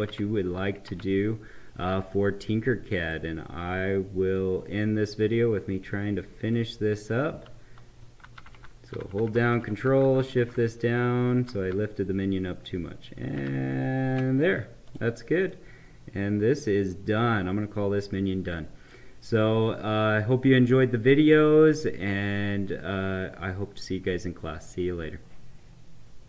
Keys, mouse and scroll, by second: 0.8 Right, 3.0 click, 4.3-8.2 drag, 8.2 ctrl+Down, 14.8 click, 15.4-21.4 right drag.